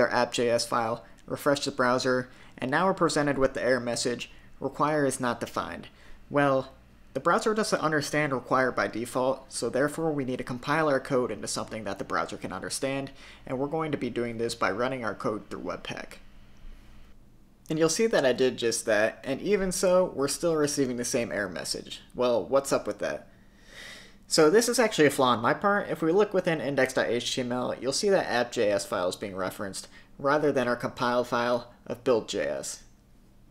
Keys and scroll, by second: 13.5 super+Tab, 13.9 super+Tab, 20.4 super+r, 32.4 super+s.